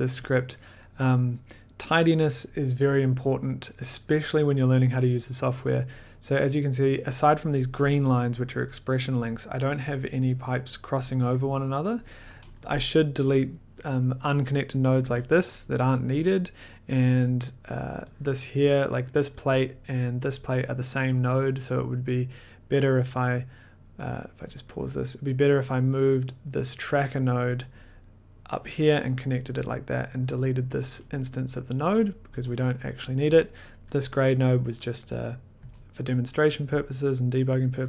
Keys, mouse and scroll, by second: 0.4 click, 0.4 middle click, 0.9 middle click, 2.5 middle click, 3.6 middle click, 5.1 middle click, 6.7-7.4 scroll, 7.4 scroll, 9.2-9.8 scroll, 11.5-12.4 scroll, 12.7 click, 12.8-13.1 scroll, 14.5 click, 15.0 BackSpace, 15.5 middle click, 16.3 click, 16.5 middle click, 16.9 middle click, 17.4 click, 17.9 click, 18.6 click, 19.1 click, 19.6 click, 19.7 middle click, 20.0 middle click, 20.6 click, 21.1 middle click, 22.7 middle click, 24.5 click, 25.0 middle click, 26.0 click, 27.4 click, 29.3 click, 30.3 click, 31.7 middle click, 32.3 BackSpace, 33.2 click, 34.3 click, 35.6 BackSpace, 36.1-36.7 scroll, 36.8 click.